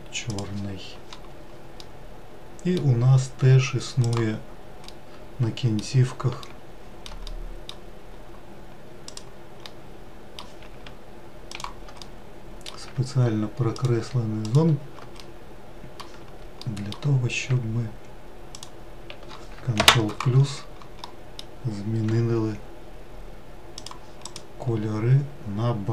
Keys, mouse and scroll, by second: 1.7-3.2 middle drag, 3.2-3.8 scroll up 1, 3.9 click, 4.6-7.8 middle drag, 7.8-8.9 scroll up 1, 8.9 click, 9.4-11.3 middle drag, 11.3 shift+click, 11.8-14.3 middle drag, 14.3 shift+click, 14.9-18.4 middle drag, 18.4 shift+click, 19.5 ctrl+KP_Add, 21.8 g, 24.1 click, 24.5-25.1 scroll down 2.